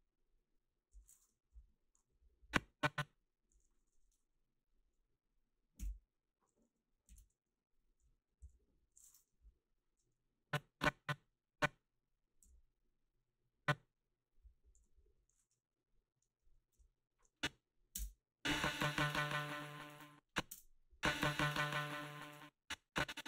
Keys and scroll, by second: 1.5 Delete, 5.8 Delete, 7.1 ctrl+z, 8.5 g, 9.4 Delete, 12.4 g, 14.8 g, 16.7 Delete, 17.9 space, 19.9 space, 20.5 space, 22.2 space.